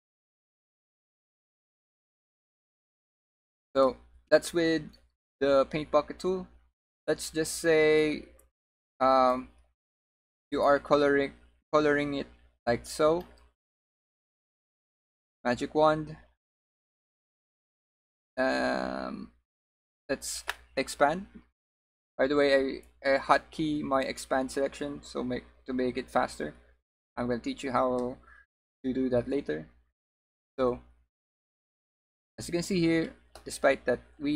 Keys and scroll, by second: 14.2 w.